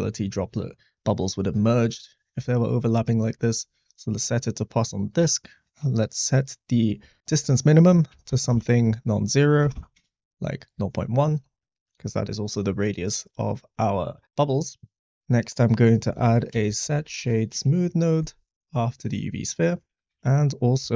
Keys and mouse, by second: 1.9 middle click, 5.1-7.2 drag, 7.3-9.9 drag, 11.7 middle drag, 12.9 click, 14.0 middle click, 14.9 shift+a, 19.8 click, 20.1 shift+a.